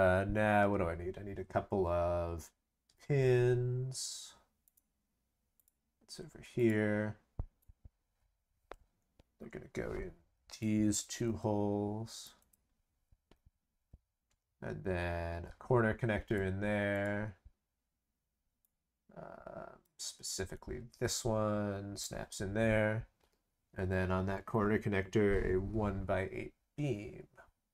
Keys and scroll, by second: 11.0 ctrl+c, 11.2 ctrl+v.